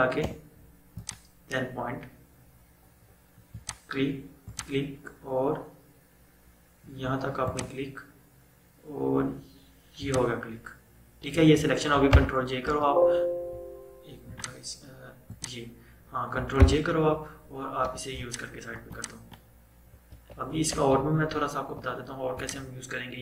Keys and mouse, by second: 0.4 BackSpace, 1.0 click, 3.6 click, 7.6 click, 10.1 click, 12.2 ctrl+j, 14.4 click, 16.6 ctrl+j, 17.9 v, 18.2-20.2 drag, 20.2 ctrl+z, 21.6 -, 22.4 click.